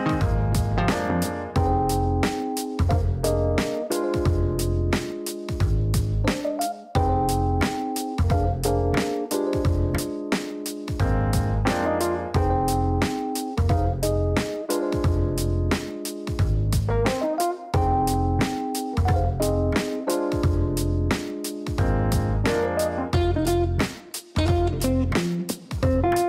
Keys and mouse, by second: 0.0-0.5 typing, 1.6-2.5 typing, 3.0 Down, 3.4 Return, 4.9 click, 6.1 click, 9.2 click, 11.7 click, 12.9 click, 13.3 click, 14.0 click, 14.9 right click, 20.7 click, 23.4 click, 25.9 click, 26.1 click.